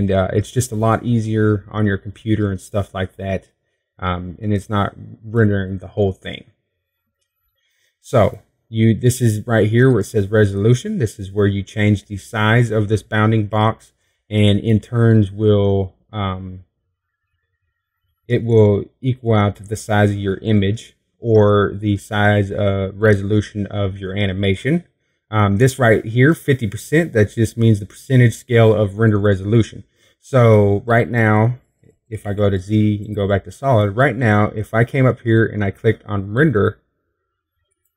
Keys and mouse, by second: 32.3 z.